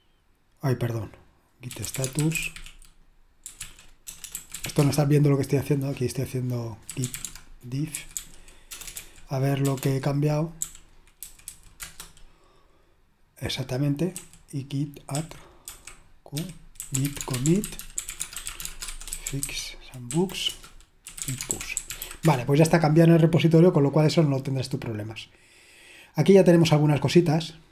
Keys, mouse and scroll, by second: 1.5-5.1 typing, 6.7-11.5 typing, 11.7 Return, 13.1-22.5 typing, 20.1 Right, 26.4 click.